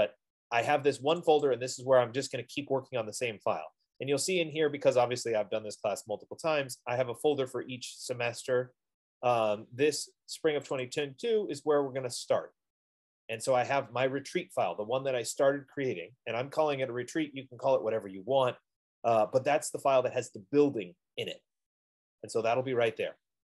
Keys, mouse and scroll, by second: 1.5 click, 2.1 click, 11.1 click.